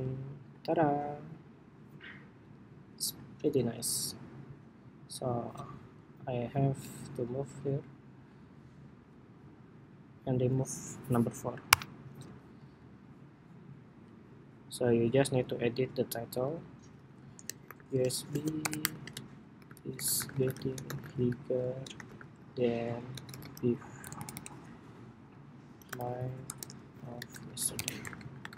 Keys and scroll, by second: 3.5 super+x, 7.2 super+v, 16.7 super+a.